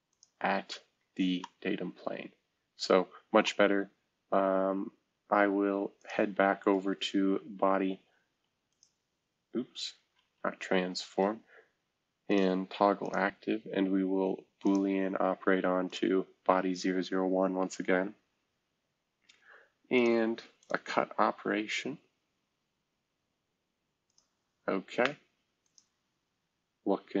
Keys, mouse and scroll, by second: 0.9 space, 1.3-3.4 drag, 3.6-4.0 scroll down 1, 4.0-5.0 scroll up 1, 6.2 space, 6.6 click, 8.6-10.2 middle drag, 10.3 Escape, 10.3-11.0 middle drag, 11.0-11.9 drag, 11.9-13.0 middle drag, 20.0 middle drag, 24.2-27.2 middle drag.